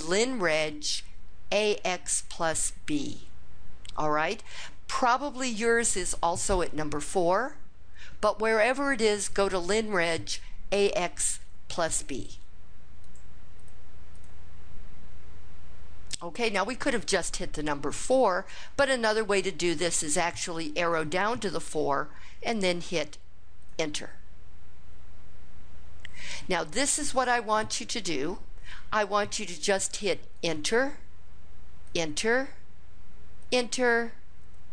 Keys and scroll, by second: 12.9 Down, 13.4 Down, 14.0 Down, 23.5 Return, 30.2 Return, 31.7 Return, 33.3 Return.